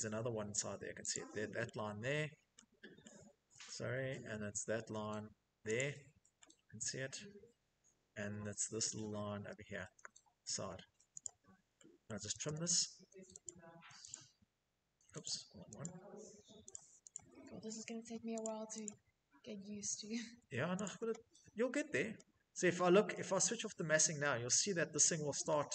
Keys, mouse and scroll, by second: 1.8 shift+middle click, 3.4 shift+middle click, 5.5 click, 8.2 shift+middle click, 10.5 click, 11.3 middle click, 11.4-12.3 typing, 12.7 click, 13.4 click, 14.5 click, 15.1 click, 15.9 click, 16.4 click, 17.7 click, 18.1 click, 18.3 middle click, 18.4 middle click, 20.1 click, 22.0 shift+middle click, 22.4 scroll, 22.8 Escape, 23.0 middle click, 24.4 shift+middle click, 24.7 middle click, 24.8 middle click, 24.9 middle click.